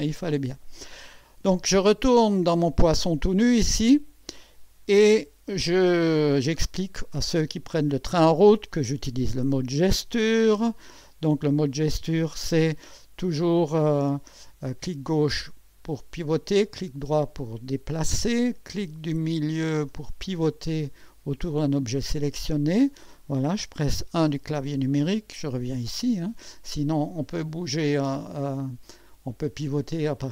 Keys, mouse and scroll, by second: 2.9 click, 3.7-4.6 drag, 5.1 1, 5.8-6.5 right drag, 6.8 scroll up 1, 10.5 right click, 13.0 click, 13.9 click, 14.8-16.5 drag, 16.5-18.4 right drag, 19.7 middle click, 20.4-23.1 drag, 24.2 KP_1, 24.9-26.0 right drag, 27.3-28.0 drag, 28.2-29.3 drag.